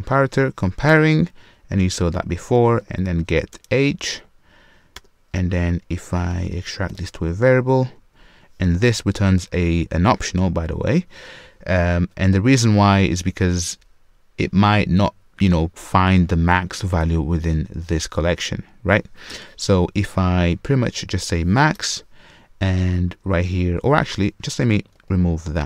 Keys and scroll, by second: 1.0 Return, 6.0 super+w, 6.9 super+w, 6.9 alt+super+v.